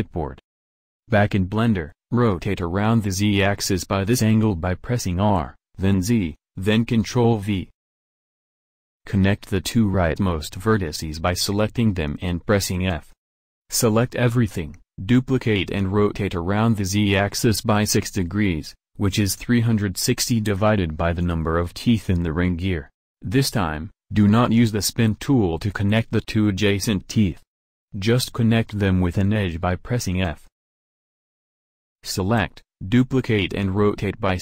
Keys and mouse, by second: 0.9 r, 11.7 f, 14.1 a, 14.4 a, 14.8 shift+d, 30.0 f, 31.1 a, 31.2 a, 31.9 shift+d, 33.8 a, 34.0 a.